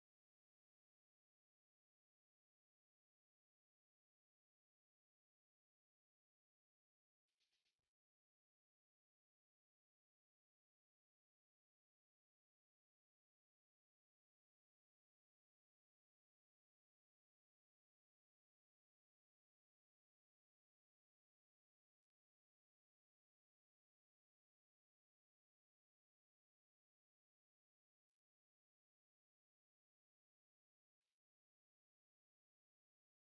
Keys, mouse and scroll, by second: 3.1-5.2 typing, 6.4 click, 7.4-7.7 typing, 9.2 click, 9.6 F10, 14.8 F10, 15.4 click, 17.4 right click, 18.1 scroll up 1, 18.5 right click, 19.5-21.4 typing, 21.8-22.2 scroll up 1, 23.0 click, 23.3 Tab, 23.3 F10, 23.8 click, 24.9-28.1 typing, 28.4 Return, 29.2-33.2 drag.